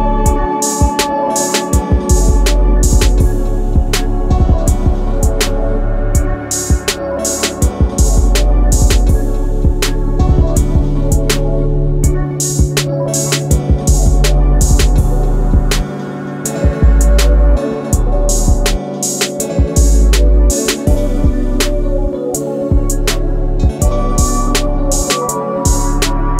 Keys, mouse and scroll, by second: 2.5 click, 4.7 typing, 6.2 click, 14.6 click, 16.9 shift+click, 17.9 Return, 19.6 click, 21.8-23.7 scroll up 1, 23.7 scroll up 1, 24.6 click, 25.5 scroll down 1, 26.2 scroll up 1.